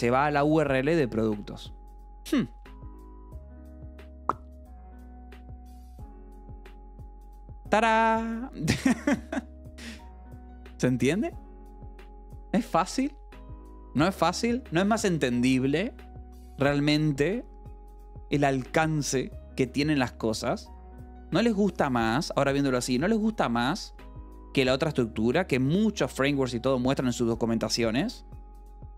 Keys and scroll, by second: 2.6 j, 3.4 k, 4.1 d.